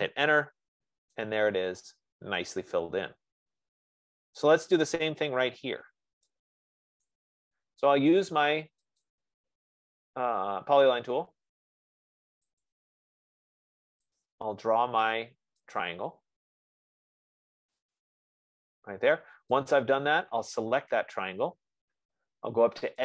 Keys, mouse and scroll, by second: 0.1 Return, 4.7 right click, 7.5 right click, 9.6 click, 13.0 click, 16.0 middle click, 18.3 middle click, 20.5 F15.